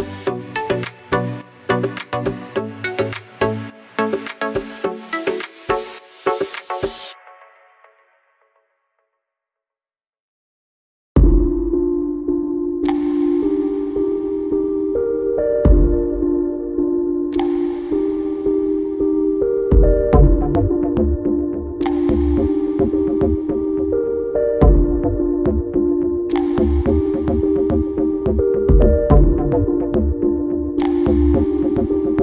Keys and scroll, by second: 14.0 2.